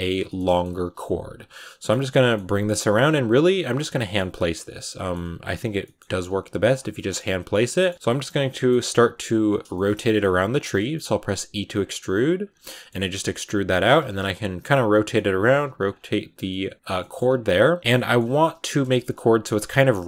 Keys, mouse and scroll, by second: 0.1 shift+middle click, 0.6 r, 0.9 g, 1.3-2.4 middle drag, 2.4 r, 3.0 g, 3.8 middle click, 4.5 right click, 4.6 middle click, 5.1 g, 5.7 middle click, 5.9 g, 6.5 r, 6.8 middle click, 7.4 right click, 7.6 middle click, 8.0 g, 8.3 middle click, 8.8 e, 9.6 shift+middle click, 10.3 g, 10.6 middle click, 11.0 r, 12.0 r, 12.5 middle click, 12.9 g, 14.1 r, 15.0 middle click, 15.5 g, 16.0 middle click, 16.2 scroll up 2, 16.3 middle click, 16.7 g, 16.9 middle click, 17.1 scroll up 2, 17.3 g, 17.7-19.6 middle drag, 19.6 r, 19.9 g.